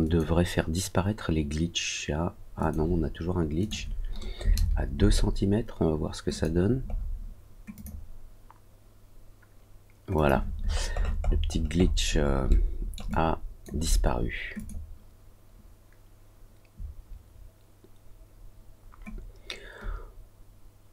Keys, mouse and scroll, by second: 0.0 click, 2.5 click, 3.5 click, 6.2 click, 6.8 scroll down 1, 6.9 scroll up 1, 7.7 click, 10.1 click, 10.6 scroll down 1, 10.6 scroll up 1, 10.9-11.5 scroll down 3, 11.5 scroll up 1, 11.7-12.1 scroll down 2, 12.1 scroll up 1, 12.4 alt+middle click, 13.0 alt+click, 14.5 click.